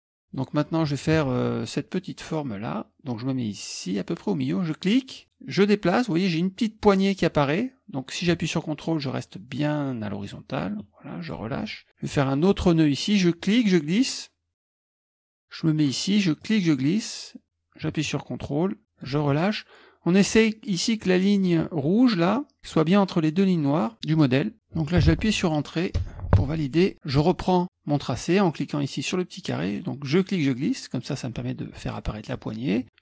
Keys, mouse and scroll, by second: 0.0 middle click, 0.3 click, 1.1 KP_Subtract, 6.0-15.2 drag, 16.4-19.1 drag, 26.0 Return, 30.1-33.0 drag.